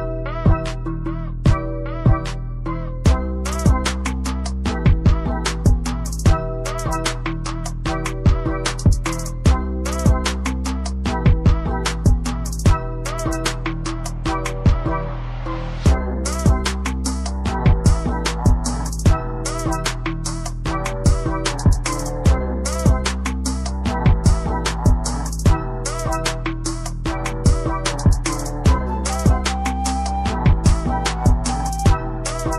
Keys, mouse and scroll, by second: 0.2 click, 0.6 scroll down 1, 1.5 click, 1.5 scroll up 1, 2.5 click, 3.4 scroll down 1, 3.8 click, 5.0 ctrl+z, 5.3 click, 5.7 scroll down 1, 6.5 click, 7.5 click, 8.6 click, 10.8 click, 12.3 scroll up 1, 12.9-13.4 scroll down 1, 13.5 ctrl+z, 14.5 click, 24.5 click, 31.0 scroll up 1, 31.6 click.